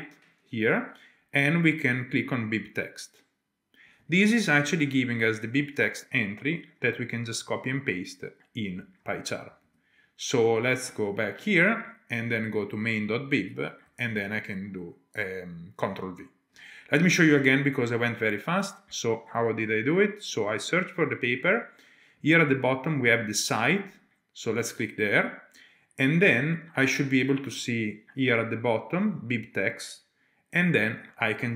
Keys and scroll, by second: 11.3 typing, 18.3 typing.